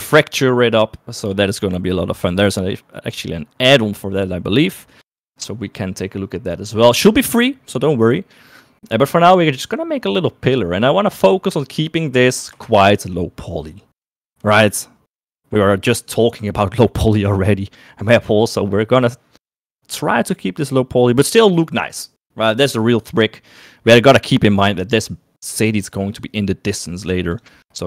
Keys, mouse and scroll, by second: 14.1 shift+middle click.